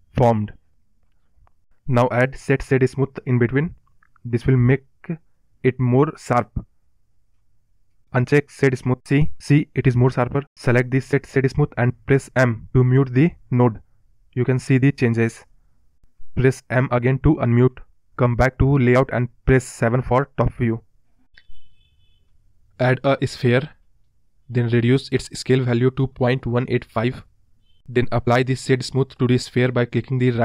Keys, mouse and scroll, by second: 0.0-0.5 scroll down 4, 4.0 o, 6.2 scroll down 1, 6.4-8.5 middle drag, 9.2-11.4 scroll up 9, 17.3-18.4 scroll down 1, 18.4 scroll down 4, 18.6 click, 19.0-20.4 scroll up 18, 20.4-22.0 scroll down 17, 22.0-22.7 middle drag, 22.7 shift+a, 23.0-23.5 scroll up 6, 26.3 click, 27.2-28.5 scroll up 6, 29.0-30.4 drag.